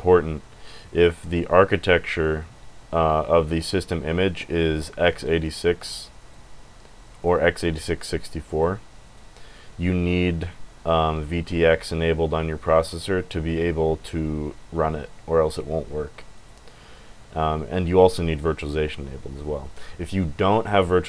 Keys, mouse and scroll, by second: 5.3 click, 6.2 click, 7.2 click, 8.5 click, 9.0 click, 16.3 click.